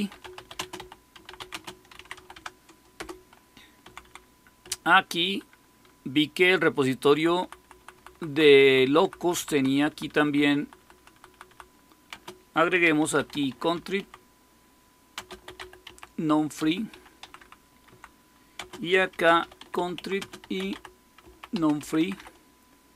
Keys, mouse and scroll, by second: 0.0-2.6 typing, 2.9 Return, 3.8 Down, 4.0 Down, 4.6 Right, 4.9-7.1 typing, 7.7 Right, 7.9 Right, 8.2 Right, 8.4 Right, 8.6 Right, 8.8 Right, 8.9 Right, 9.5 Right, 9.6 Right, 10.0 Right, 10.2 Right, 10.5 Right, 10.7 Right, 10.9 Right, 11.2 Right, 11.4 Right, 12.0-22.6 typing.